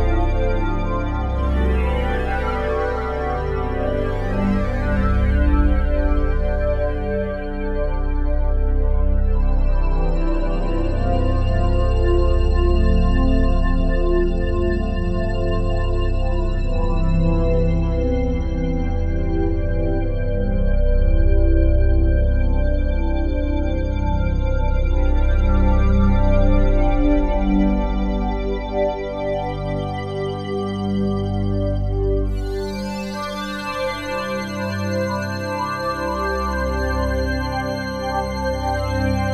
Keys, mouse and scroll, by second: 1.9 space, 3.0 ctrl+s, 5.5-5.9 typing, 6.2 Return, 7.3-9.1 drag, 9.1 ctrl+a, 10.2 typing, 10.6 Return, 11.6-19.4 drag, 19.4 typing, 19.8-24.2 alt+shift+drag, 24.4 click, 29.4-31.8 typing, 32.9-34.5 ctrl+alt+drag, 34.3-35.0 typing, 35.3-36.6 drag, 36.3-37.1 typing, 38.0-39.3 drag.